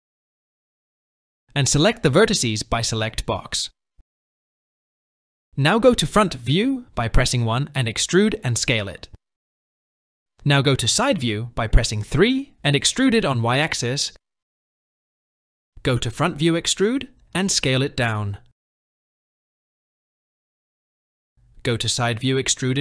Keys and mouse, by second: 1.5 click, 1.9 typing, 3.8 click, 5.1 KP_1, 10.7 KP_3, 13.3 e, 15.6 KP_1, 17.4 e, 21.7 KP_3, 22.4 e.